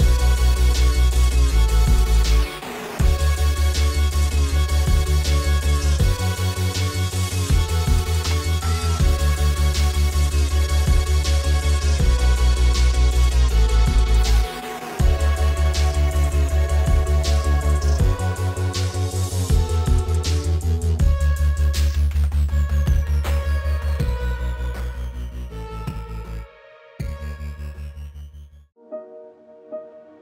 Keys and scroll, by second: 28.2 super+z.